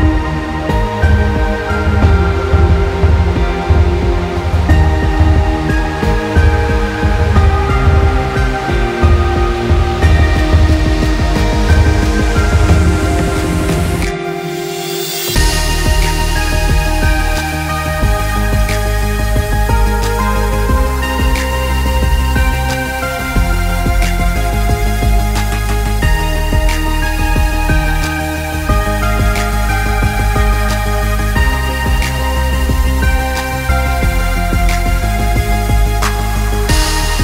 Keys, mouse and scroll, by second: 0.2 middle click, 1.7 g, 2.7 middle click, 4.2 click, 4.9 g, 8.5 s, 9.8-10.2 scroll down 2, 10.1 middle click, 10.5 click, 10.6 middle click, 11.2-11.7 scroll up 2, 11.8 scroll down 1, 12.1 middle click, 13.1 middle click, 13.6 middle click, 14.0 click, 14.8 middle click, 15.5 click, 16.0 middle click, 16.5 click, 17.4 shift+click, 19.0 shift+d, 20.3 click, 21.3 click, 21.3 middle click, 22.3 shift+d, 23.2 middle click, 24.5 middle click, 25.0 click, 25.4 middle click, 26.8 scroll up 2, 27.0 middle click, 27.6 click, 28.6 right click, 31.9-32.2 scroll down 4, 32.2 right click, 35.5-35.8 scroll down 3, 36.3 shift+click.